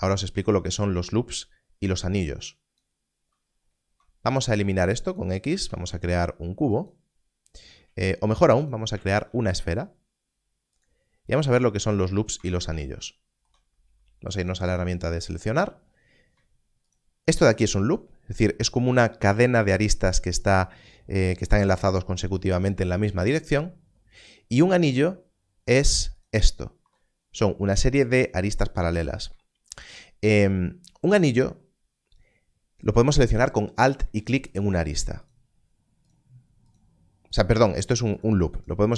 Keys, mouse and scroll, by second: 3.3-3.9 scroll down 1, 3.9 Tab, 4.5 x, 5.1 click, 5.6 shift+a, 6.7 click, 8.2 click, 8.3 x, 9.1 shift+a, 10.7 click, 11.6-12.3 scroll up 1, 12.3 Tab, 14.4 click, 16.8 alt+click, 26.1 ctrl+alt+click, 29.8 alt+click, 34.5 alt+click, 36.0 alt+click.